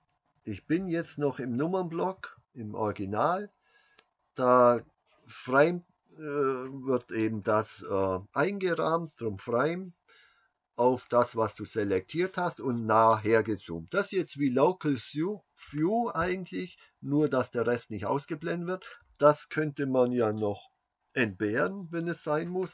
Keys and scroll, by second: 2.2 KP_Decimal.